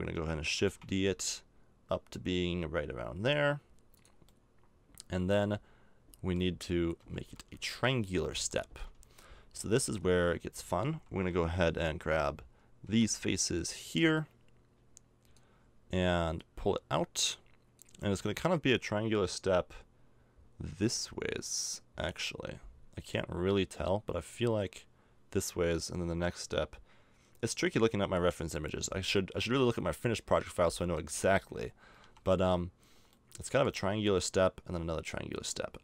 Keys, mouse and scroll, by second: 0.6 shift+d, 4.3-5.7 middle drag, 6.1 middle click, 7.0 KP_7, 10.5-11.7 middle drag, 11.7 a, 12.9 b, 29.1 middle click, 29.9 middle click, 30.1 middle click, 32.0 KP_7.